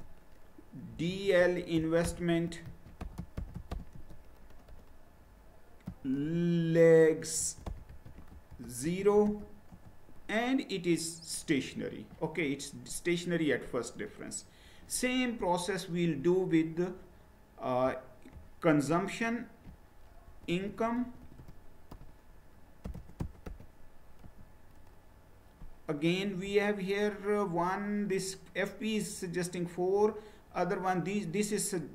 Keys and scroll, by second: 0.0-4.2 typing, 5.6-6.3 typing, 7.4-9.7 typing, 9.7 Return, 20.3-21.3 typing, 22.6-24.0 typing, 24.2 Return.